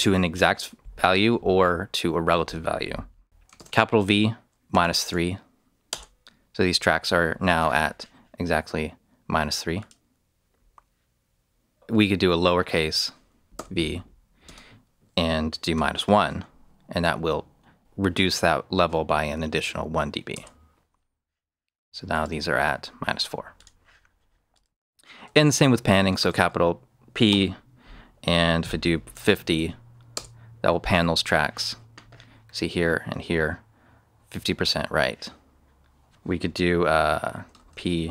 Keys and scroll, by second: 3.5-5.3 typing, 5.8 Return, 11.9 BackSpace, 13.5 v, 14.4 space, 15.8 1, 20.3 Return, 26.1 shift+p, 27.2 shift+space, 28.7-29.5 typing, 30.1 Return, 37.6-38.1 typing.